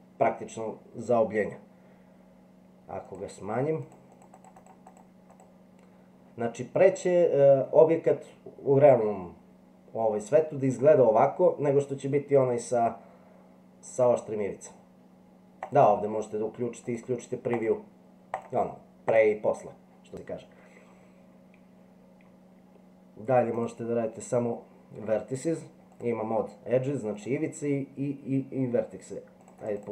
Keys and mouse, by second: 4.1 click, 4.4 click, 6.9-7.6 middle drag, 13.9 click, 15.6 click, 16.8 click, 17.5 click, 18.3 click, 19.0 click, 23.6 click, 26.0 click, 27.2 click, 29.5 click, 29.6 click.